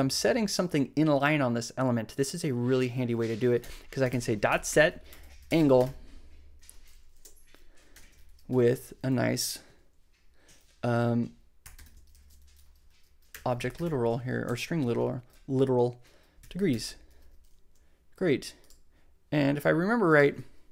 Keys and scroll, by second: 0.0-0.1 typing, 3.7-6.3 typing, 7.1 Right, 7.9 ,, 8.9 Left, 9.6 shift+Left, 11.3-14.4 typing, 14.4 Right, 16.1-17.2 typing.